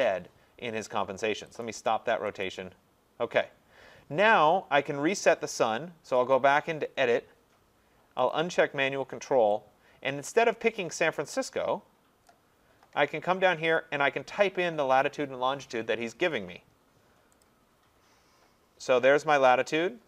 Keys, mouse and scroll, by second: 1.6 click, 2.4 click, 6.3 click, 8.3 click, 12.3 click, 13.8 click, 17.5 click.